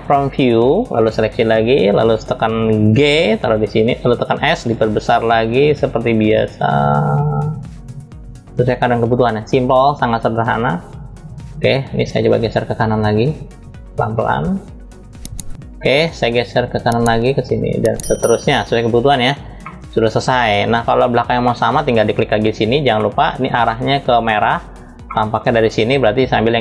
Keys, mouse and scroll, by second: 0.7-1.8 drag, 2.6 g, 10.0-11.1 drag, 11.8 click, 13.3-14.9 drag, 16.4-18.2 drag, 19.3-20.8 middle drag, 21.1 middle click, 21.8 click, 22.7 middle click, 24.7 middle click.